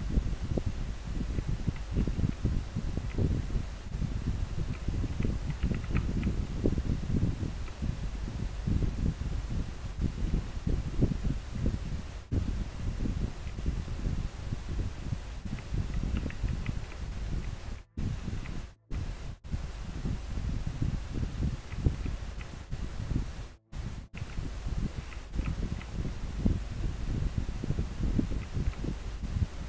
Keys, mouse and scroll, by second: 1.5 scroll down 1, 3.2 scroll up 1, 5.3 scroll down 1, 6.2 scroll up 1, 10.4 scroll down 1, 15.7 scroll down 1, 21.7 scroll down 1, 22.4 scroll up 1, 25.2 scroll up 1, 28.5 scroll down 1.